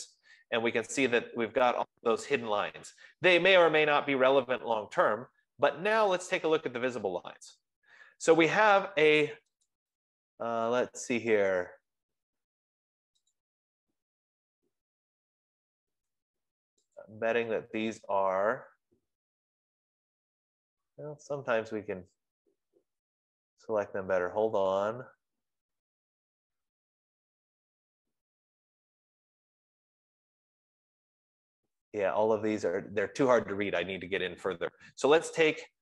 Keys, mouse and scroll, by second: 6.9 click, 7.8 click, 10.3 click, 13.9 click, 17.3 click, 35.7 click.